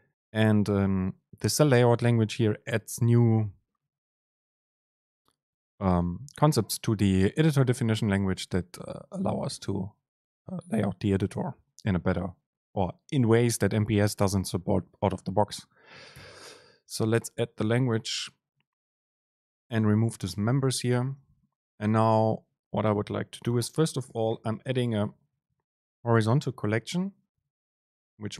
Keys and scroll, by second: 18.7 Down, 18.9 Up, 19.3 shift+Down, 21.0 BackSpace, 21.2 Return, 21.3 super+space.